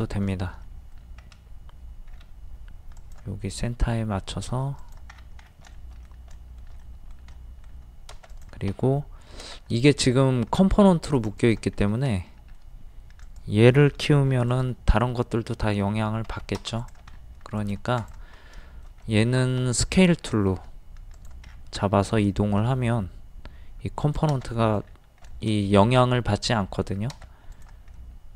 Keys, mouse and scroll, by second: 0.6 middle click, 1.0-1.6 scroll up 1, 3.0 click, 4.8 click, 5.1 scroll down 1, 5.8 shift+middle click, 6.4 shift+middle click, 8.3 click, 8.7 s, 10.1 scroll up 1, 10.6 middle click, 11.2 click, 11.8 scroll up 1, 12.1 middle click, 13.2 click, 14.3 d, 14.5 click, 16.3 Escape, 16.8 click, 17.1 middle click, 17.6 click, 18.6-20.8 shift+middle drag, 21.2 click, 21.5 scroll down 1, 22.3 shift+middle click, 24.0 click, 24.5 middle click, 24.8-25.2 scroll down 1, 25.4 shift+middle click, 26.9 scroll down 1, 27.5 click, 28.0 middle click.